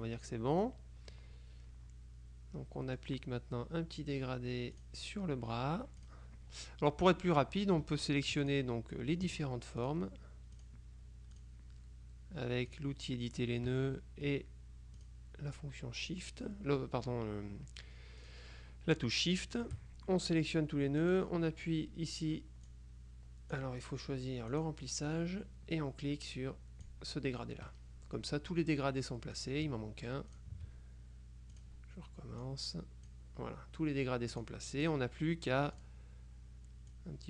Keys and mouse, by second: 0.7 click, 4.9 click, 6.1 click, 7.2 click, 8.5 shift+click, 9.9 click, 10.7 click, 11.5 click, 12.8 click, 15.1 click, 16.3 click, 18.3 click, 19.4 click, 21.1 click, 22.8-24.1 drag, 24.6 click, 29.5 shift+click, 30.4 shift+click, 31.6 click, 32.6-33.7 drag, 34.5-35.5 drag, 35.9 click, 37.0-37.2 drag.